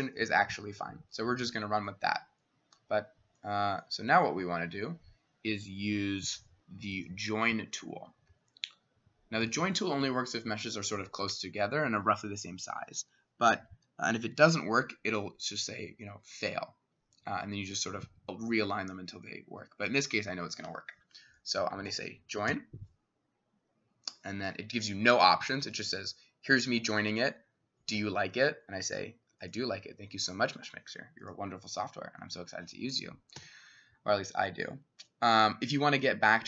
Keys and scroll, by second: 22.5 j, 32.0 Escape, 33.4 2.